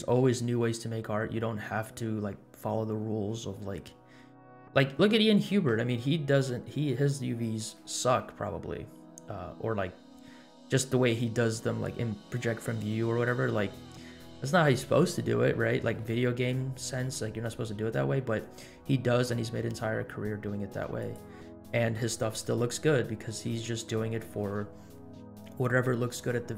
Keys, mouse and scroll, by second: 10.5-11.4 scroll up 1, 17.8 scroll down 1, 18.2 scroll up 2, 19.1 scroll up 2, 20.9 click, 21.9 KP_Decimal, 22.7 scroll down 2, 23.4-23.8 middle drag, 23.4 scroll down 1.